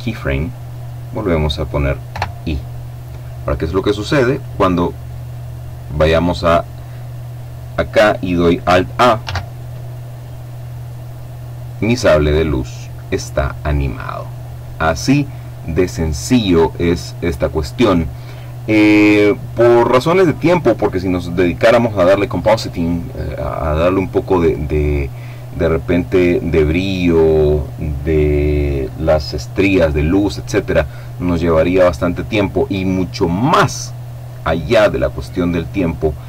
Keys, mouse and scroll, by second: 1.7 i, 3.9 click, 8.8 alt+a, 12.9 click, 13.5 click, 31.1-34.3 drag.